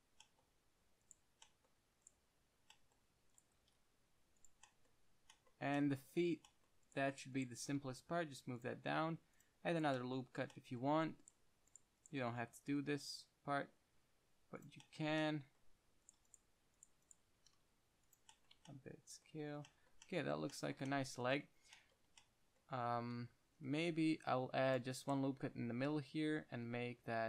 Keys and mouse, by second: 0.1 click, 0.6 click, 1.3 click, 3.9 g, 4.8 middle drag, 5.0 click, 5.0 middle click, 5.0 click, 5.2-5.7 middle drag, 5.7-6.8 drag, 6.8-8.9 drag, 7.9 g, 9.3 ctrl+r, 9.5 click, 10.3 middle click, 12.5 g, 14.9-16.0 drag, 15.4 Tab, 16.0 Tab, 16.3-17.7 middle drag, 17.7-18.4 drag, 17.7 s, 18.5-18.8 drag, 18.5-18.8 right drag, 18.6 middle drag, 18.8 Tab, 19.0-20.4 middle drag, 19.5-20.4 drag, 19.5-20.4 right drag, 22.4 Tab, 23.9 KP_1, 24.4 ctrl+r, 25.8 s.